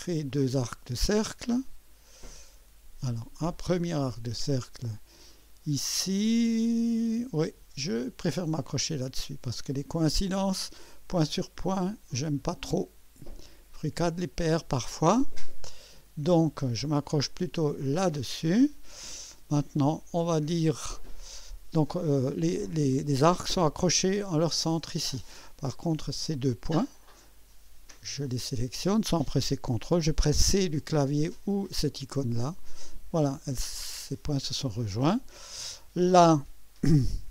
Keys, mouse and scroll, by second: 0.3 click, 3.0 click, 7.1 click, 8.7 click, 10.5 right click, 12.8 click, 14.7 click, 16.3 click, 17.8 click, 18.6 scroll up 1, 19.1 right click, 20.0 right click, 26.6 click, 28.1 click, 32.3 click, 35.2 scroll down 2.